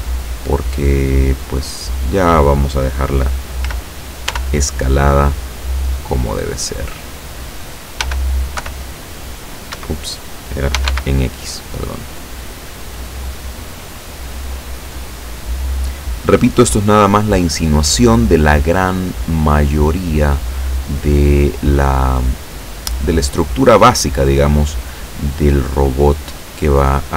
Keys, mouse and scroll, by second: 3.7 s, 4.4 y, 5.1 click, 5.8-7.6 drag, 8.1 s, 8.7 y, 9.8 Escape, 10.8 s, 10.9 x, 14.9 click, 15.5 scroll down 1, 18.1-19.1 middle drag, 19.4-24.5 middle drag, 24.9 scroll down 2, 25.1-27.1 middle drag.